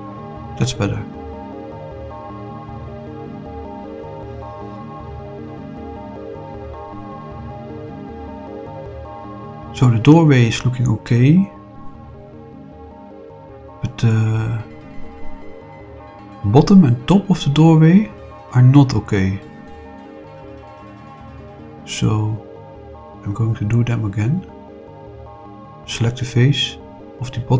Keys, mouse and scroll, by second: 0.8-6.6 middle drag, 7.0 scroll up 2, 7.5 middle click, 8.3 scroll down 2, 9.1 middle click, 10.0-13.5 middle drag, 13.9-16.3 middle drag, 16.6-19.1 middle drag, 19.4-19.9 scroll down 1, 19.9-23.1 middle drag, 24.7 click, 25.4 click, 27.3 click.